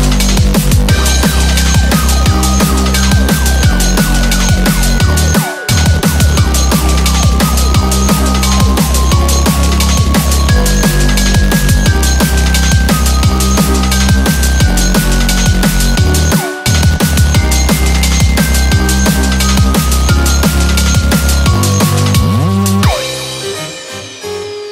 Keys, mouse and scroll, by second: 4.7 click, 5.2 shift+click, 6.2 r, 7.4 shift+click, 7.6 click, 7.6 r, 7.7 r, 9.2 click, 9.7 r, 9.7 2, 10.2 scroll down 2, 23.5 shift+click, 24.1 right click.